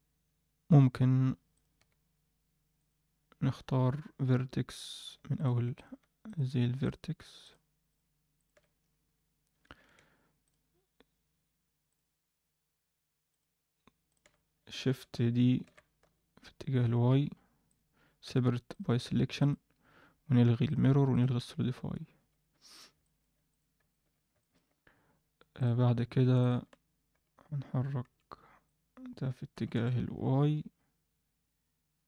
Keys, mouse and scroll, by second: 1.5 click, 1.7 Tab, 2.7 click, 5.3 click, 5.7 shift+click, 6.2 shift+click, 6.8 shift+click, 7.4 shift+click, 7.9 shift+click, 8.3 shift+click, 10.4 shift+click, 11.9 shift+click, 13.2 shift+click, 14.0 shift+click, 15.6 shift+d, 18.2 p, 19.0 Tab, 19.4 click, 20.6 click, 21.1 click, 21.6 Tab, 22.1 a, 23.0 ctrl+middle click, 23.4 click, 23.9 shift+middle click, 24.4 ctrl+alt+middle click, 25.5 click, 26.4 shift+click, 27.1 g, 28.6 click, 29.5 g.